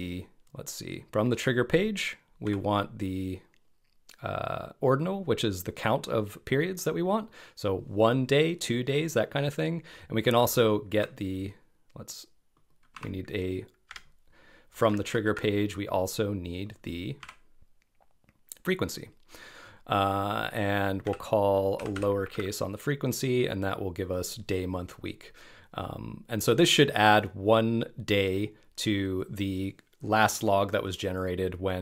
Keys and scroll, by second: 11.0 Left.